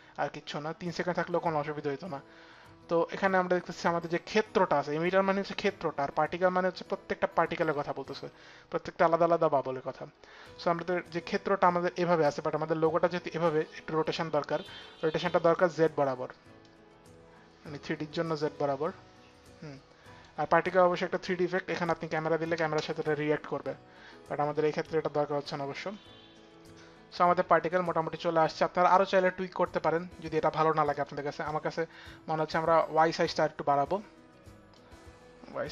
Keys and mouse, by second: 15.0 click, 16.2 click, 21.3 click, 22.1 space, 30.5 click, 31.0 click.